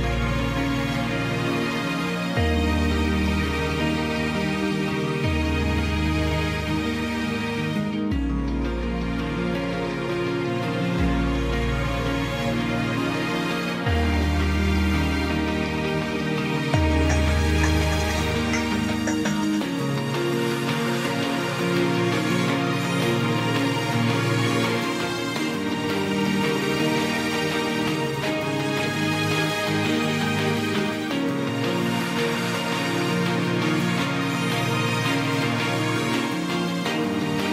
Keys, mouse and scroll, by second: 6.3 ctrl+j, 14.0 ctrl+t, 36.2 ctrl+j.